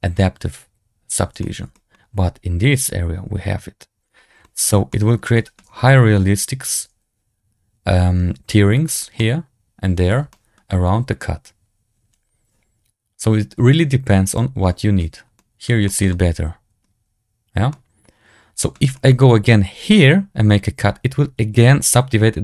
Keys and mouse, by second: 1.3 shift+middle drag, 1.6 middle drag, 4.3 shift+middle click, 4.8 middle drag, 5.2 shift+middle click, 9.1-10.0 middle drag, 10.2 shift+middle drag, 15.3 middle drag, 15.8 shift+middle drag, 16.0-16.7 middle drag, 17.6-18.6 middle drag, 18.8 shift+middle drag.